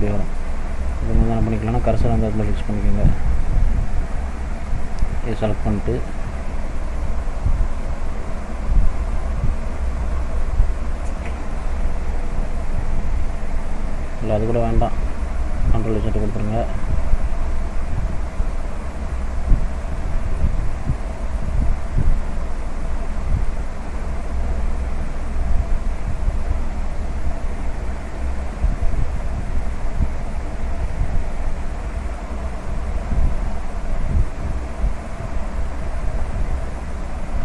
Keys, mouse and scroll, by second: 0.0 scroll up 1, 0.5 shift+middle click, 3.4 shift+right click, 4.9 shift+right click, 5.7 click, 19.6 click, 20.0 middle click, 21.1 scroll down 3, 21.4 middle click, 22.4-22.7 scroll up 1, 22.8 middle click, 23.6-24.0 scroll up 1, 24.0 middle click, 25.2 click, 26.5 click, 36.0 click, 36.7 middle click.